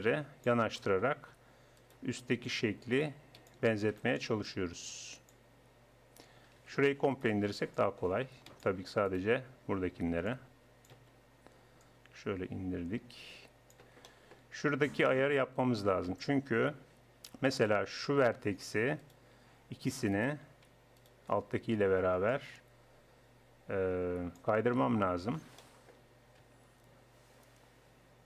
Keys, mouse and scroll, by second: 0.8 click, 1.0 right click, 1.6 middle click, 1.8 right click, 2.4-4.2 middle drag, 4.2 right click, 4.4-6.0 middle drag, 6.0 click, 6.6 a, 7.8 middle click, 9.7-11.8 drag, 10.0 c, 13.3 click, 14.1-18.2 middle drag, 18.2-22.3 right drag, 22.9-24.0 drag, 24.1 click, 24.2-25.6 middle drag, 25.6 click, 26.4 z.